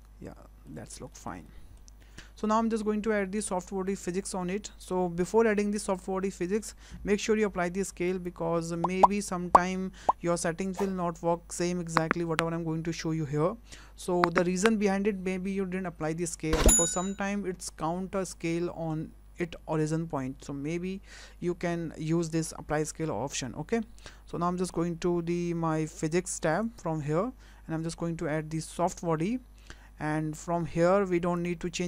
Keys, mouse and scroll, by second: 0.0 middle click, 0.9 scroll up 1, 1.1 shift+middle click, 1.5 middle click, 2.0 scroll up 1, 7.3 ctrl+a, 26.6 click, 28.8 click, 31.4 click.